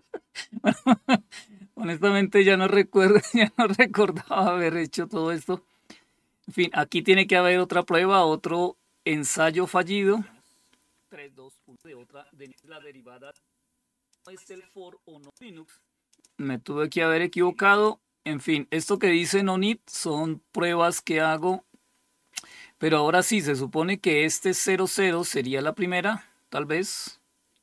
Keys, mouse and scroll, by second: 3.5 click, 4.6 click, 7.0 click, 7.2 click, 11.1 click, 11.9 click, 12.6 click, 13.5 click, 14.6 click, 15.5 click, 16.2 click, 17.2 click, 18.2 click, 19.3 click, 20.8 click, 21.8 click, 23.9 click, 24.4 click, 24.6 click.